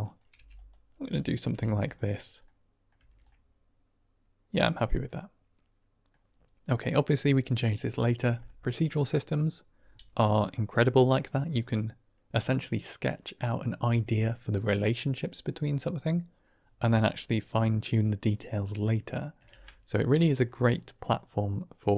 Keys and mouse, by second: 0.2 g, 0.4 click, 0.8 r, 1.4 g, 1.7 click, 2.3 middle click, 2.9 Tab, 3.2-6.0 middle drag, 10.7-14.6 middle drag, 18.9 middle click, 19.4 ctrl+space, 20.4 middle click.